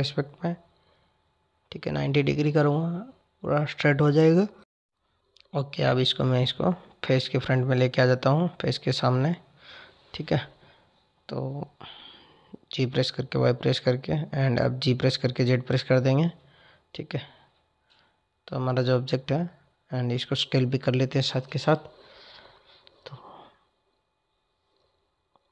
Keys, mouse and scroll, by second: 0.2-3.3 drag, 5.4 click, 6.6 click, 7.7 drag, 9.6 g, 14.0 click, 16.0 click, 18.0 f, 19.5 z, 21.2 drag, 22.2 click, 22.9 drag, 24.3 g.